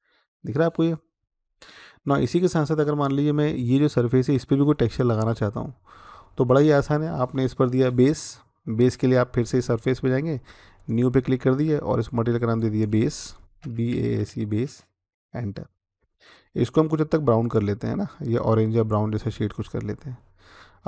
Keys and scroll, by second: 13.4-14.1 typing, 14.9 Return.